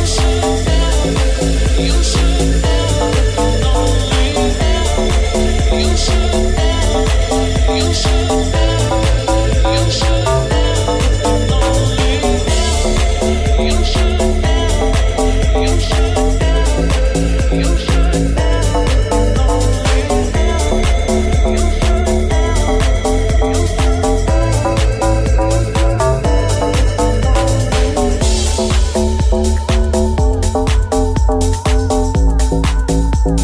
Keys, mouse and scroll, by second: 0.5-2.2 middle drag, 1.7 Tab, 2.2 right click, 2.3-10.0 middle drag, 10.0 right click, 10.1-13.9 shift+middle drag, 13.1 Tab, 13.9 right click, 13.9-26.5 middle drag, 14.6 shift+s, 15.0 Tab, 15.4 shift+a, 20.6 r, 21.8 g, 22.9 Tab, 26.5-28.8 drag, 27.0 middle click, 27.0 right click, 27.7 alt+s, 28.8-30.9 middle drag, 29.4 ctrl+z, 30.9 KP_1, 32.7 Tab.